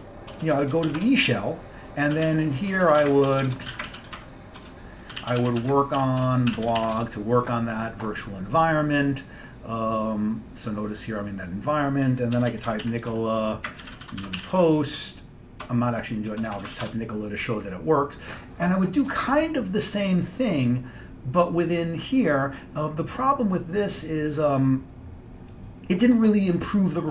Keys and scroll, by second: 0.0-1.0 typing, 1.1 Return, 2.0-7.5 typing, 4.7 Return, 12.2-17.0 typing.